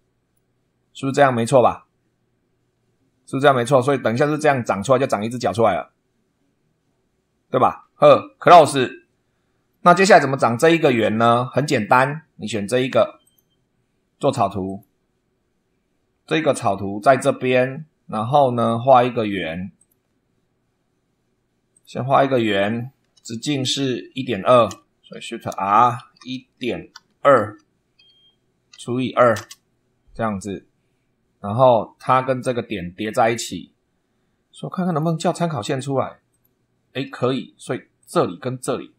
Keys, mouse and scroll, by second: 2.1-2.9 scroll up 2, 3.2-3.5 scroll down 1, 8.4 click, 9.6 middle click, 10.6 shift+middle click, 11.5 middle click, 11.6 right click, 13.1 click, 14.6 click, 15.9-16.8 scroll up 2, 17.1 shift+middle click, 19.7 click, 21.7 click, 22.3 click, 24.2 2, 24.6 Escape, 25.2 shift+click, 25.6 shift+r, 26.1 shift+1, 26.9 ., 27.3 2, 28.6 /, 29.0 2, 29.3 Return, 34.8 click, 36.2 click, 37.0 Escape, 37.9 click.